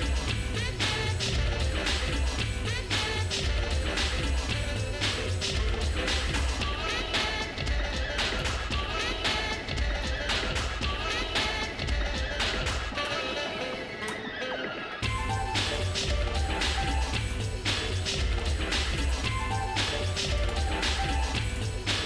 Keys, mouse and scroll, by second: 0.7 middle click, 1.2-3.0 shift+middle drag, 3.2 middle click, 3.6-4.0 scroll down 2, 4.0 middle click, 5.0 shift+middle click, 5.5 middle click, 6.8 shift+middle click, 7.3 middle click, 7.9 shift+middle click, 8.6 middle click, 9.1 scroll up 1, 9.6 shift+middle click, 10.2 middle click, 11.0 shift+middle click, 11.6 middle click, 13.1 KP_Divide, 14.0 KP_Divide, 14.9 middle click, 15.7 click, 16.2 shift+middle click, 16.6 shift+middle click, 18.4 g, 20.4 shift+click, 21.7 shift+click.